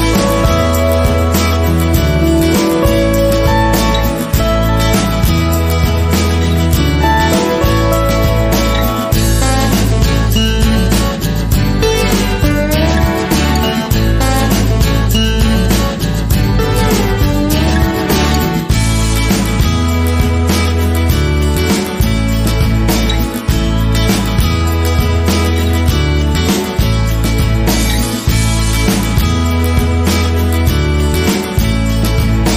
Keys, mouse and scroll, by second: 1.1 click, 7.1 click, 7.1 BackSpace, 9.7-10.1 scroll up 1, 10.4 click, 11.9 click, 13.6 g, 17.5 click, 18.1-28.9 shift+middle drag, 18.9-19.4 scroll up 2, 27.6 Tab, 28.9 click, 30.0 k.